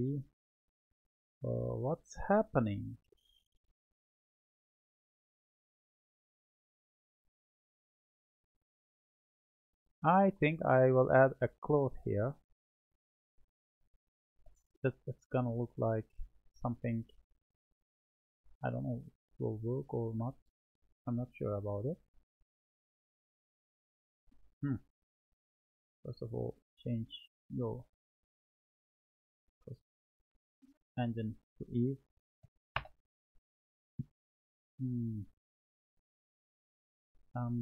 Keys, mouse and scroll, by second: 15.8-30.9 drag, 31.5-35.5 drag, 35.5-37.6 middle drag.